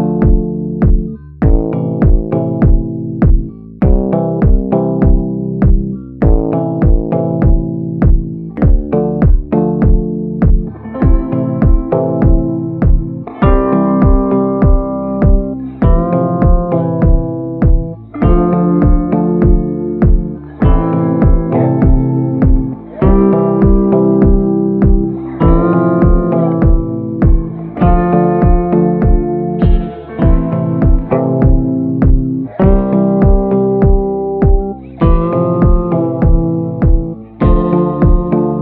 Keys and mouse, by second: 0.0 click, 0.6-1.1 [, 1.7 ctrl+z, 1.7 [, 1.8 click, 2.5 click, 2.7 click, 3.0 click, 3.9 click, 4.1 click, 4.5 click, 5.0 [, 5.3 [, 5.4 click, 6.5 ctrl+z, 6.5 click, 7.7 ctrl+z, 7.8 [, 8.2 click, 8.8 ctrl+z, 9.0 ], 9.1 ], 9.3 click, 10.1 ctrl+z, 10.4 [, 10.7 [, 10.9 click, 10.9 [, 11.3 click, 12.0 ], 12.1 ], 12.2 click, 19.8 click, 20.4 ctrl+z, 21.8 middle click, 22.7 middle click, 23.1 shift+middle click, 23.5 middle click, 24.2 middle click, 24.6 click, 26.6 a, 27.4 ctrl+i, 27.9 b, 28.6 b, 30.1 b, 33.7 ctrl+b, 34.0 ctrl+z, 35.7 b.